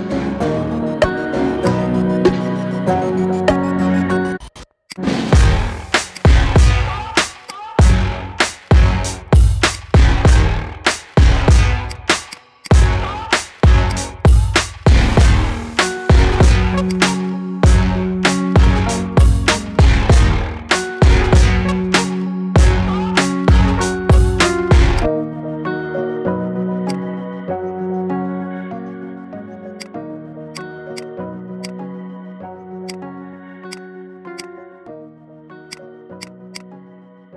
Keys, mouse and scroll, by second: 0.2 s, 2.3 KP_1, 3.0 shift+middle drag, 3.2-3.6 scroll up 3, 3.6-4.4 shift+middle drag, 4.4 s, 9.2-9.7 scroll down 4, 9.7 click, 10.9 click, 12.3 click, 12.6 click, 13.9-16.4 right drag, 16.9 click, 22.8-23.2 scroll down 2, 24.1-25.0 scroll down 4, 25.0-27.0 drag, 27.1-27.5 scroll down 5, 27.8-28.4 middle drag, 28.4-28.7 scroll up 4, 28.7-29.8 middle drag, 29.8-30.6 right drag, 31.0 click, 31.6-34.8 right drag, 34.8 middle click, 35.7 click, 36.2 click, 36.6 click.